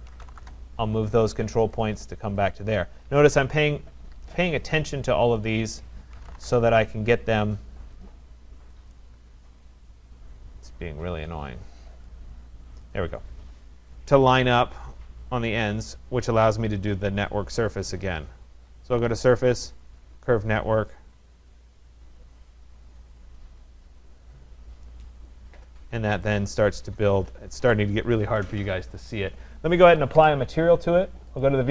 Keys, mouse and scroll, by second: 0.0-2.4 typing, 1.9 click, 2.5 click, 2.9 Escape, 2.9 shift+click, 3.1 Escape, 3.8-4.2 scroll, 4.4-6.9 typing, 4.5 click, 5.4 click, 8.0 click, 8.8 click, 10.3-11.5 scroll, 12.0 click, 12.9 click, 13.2-14.1 scroll, 15.6 scroll, 17.0 click, 18.8 click, 22.5 click, 24.3-25.2 scroll, 25.3 click, 26.1 middle click, 26.3 right click, 26.7 click, 27.7 right click, 29.0 click, 30.4 click, 31.5 click.